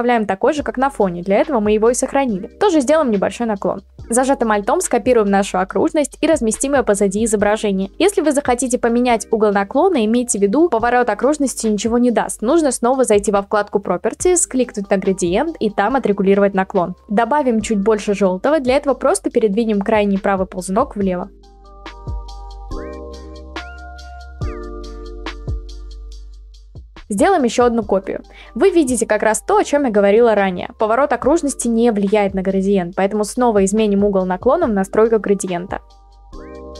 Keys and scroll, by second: 6.8 ctrl+t, 9.4 Return, 13.2-14.0 typing, 27.3 ctrl+t, 28.8 Return, 29.8 ctrl+z, 31.3 ctrl+t, 33.9 ctrl+t, 35.1 Return.